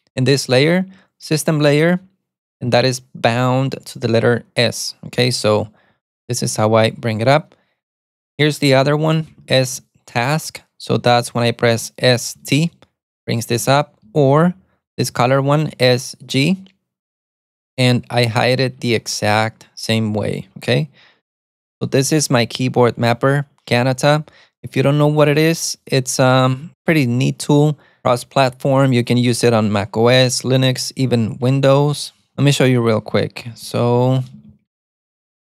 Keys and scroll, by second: 8.7-10.2 typing, 12.5 alt+super+a, 12.6 t, 14.0-15.7 typing, 16.4 alt+super+c, 19.0 alt+super+c, 21.3-23.3 typing, 33.5-35.4 typing.